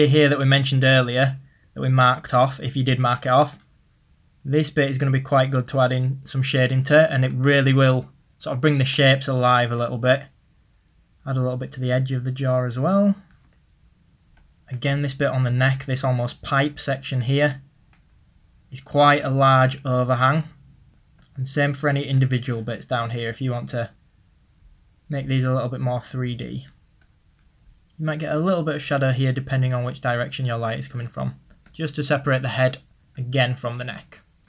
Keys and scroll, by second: 0.2 ctrl+z.